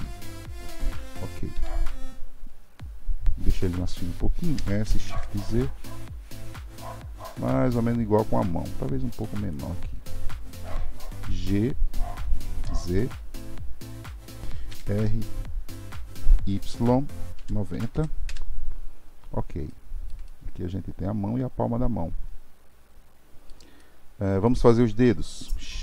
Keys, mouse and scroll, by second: 1.5 KP_3, 4.5 s, 14.4 ctrl+z, 14.7 r, 19.7-23.4 shift+middle drag, 23.8-25.8 shift+middle drag.